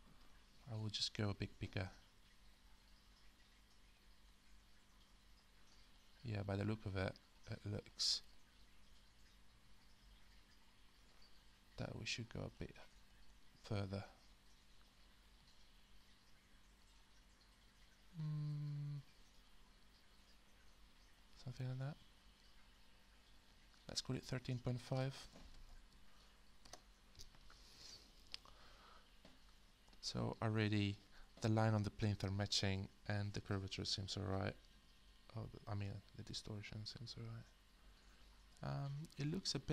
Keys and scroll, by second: 25.0-26.4 typing, 26.7 Return.